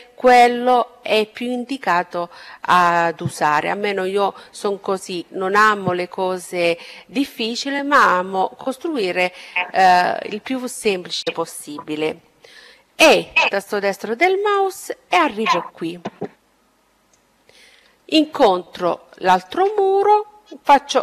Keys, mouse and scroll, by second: 11.7 e, 13.5-15.2 drag, 16.3-19.9 middle drag, 20.0 e.